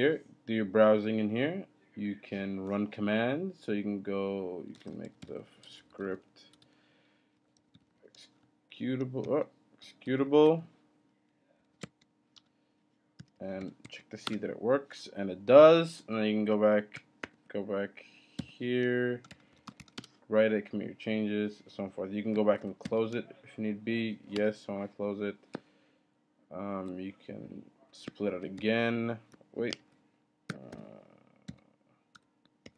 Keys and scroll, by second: 1.8 typing, 4.6-14.1 typing, 9.2 Up, 12.4 Return, 14.2 Return, 17.2 ctrl+b, 19.0-20.3 typing, 22.6 ctrl+b, 22.8 x, 23.9-24.6 typing, 28.3 ctrl+b, 28.6 o, 29.7 ctrl+b, 30.7 ctrl+b, 31.7 o, 32.1 BackSpace, 32.6 ctrl+b.